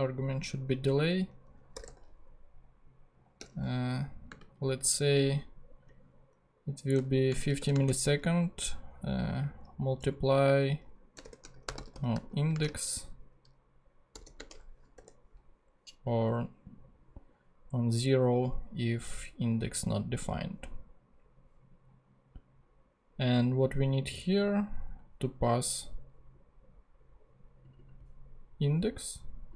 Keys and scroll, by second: 1.5-2.3 typing, 4.5 Left, 7.3 shift+space, 7.6 shift+8, 7.7 shift+space, 11.0-12.6 typing, 14.1 shift+/, 14.4 shift+space, 15.0 shift+0, 15.5 0.